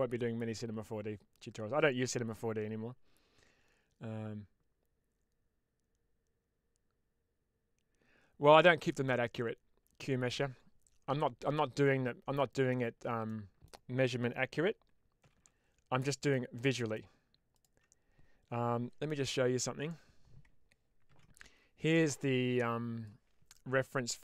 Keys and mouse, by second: 11.3-12.6 middle drag, 13.1 middle click, 15.1 g, 15.2 g, 16.1 click, 16.4 middle click, 17.4 click.